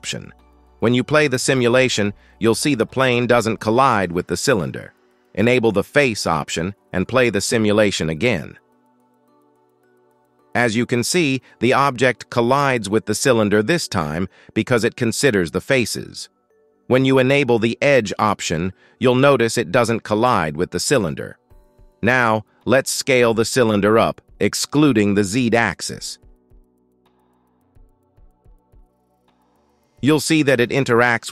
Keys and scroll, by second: 0.8 space, 2.3 space, 2.8 shift+Left, 3.0 space, 4.3 space, 8.9 shift+Left, 9.1 space, 10.4 space, 10.9 shift+Left, 11.8 space, 13.0 space, 13.8 shift+Left, 17.6 space, 19.1 space, 19.6 shift+Left, 19.8 space, 21.6 space, 23.6 s, 27.5 shift+Left, 28.7 space, 29.6 space, 30.1 shift+Left, 31.0 space.